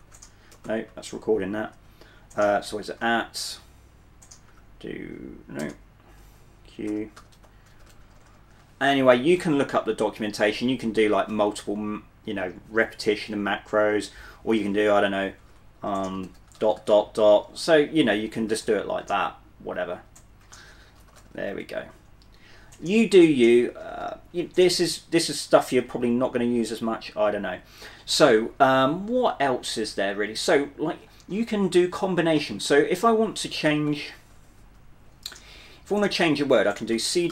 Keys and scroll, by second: 0.0-1.8 typing, 2.9 shift+2, 4.6 1, 6.3-8.6 typing, 15.2-22.5 typing, 24.1-26.9 typing, 33.9-34.7 typing, 37.0 c.